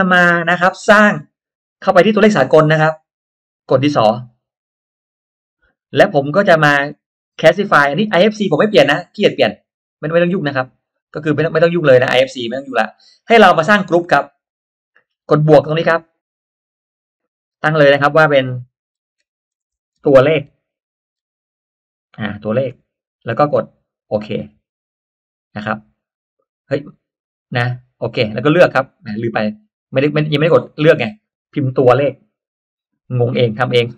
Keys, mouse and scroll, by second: 4.6 click, 8.4 click, 9.0 click, 10.2 click, 11.7 click, 16.5 click, 19.0-21.1 typing, 24.3 click, 28.2 click, 30.1-30.7 drag, 31.8 9, 32.5 y, 33.6 click.